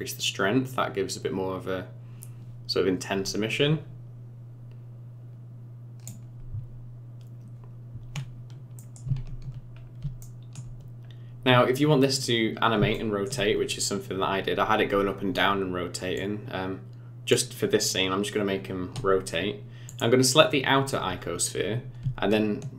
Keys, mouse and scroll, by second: 8.8 middle click, 9.8 scroll up 3, 10.2 shift+middle click, 11.1-11.8 scroll up 1, 12.9 shift+middle click, 16.2 click, 19.8 click, 21.1-21.7 scroll up 4, 21.7 scroll down 2.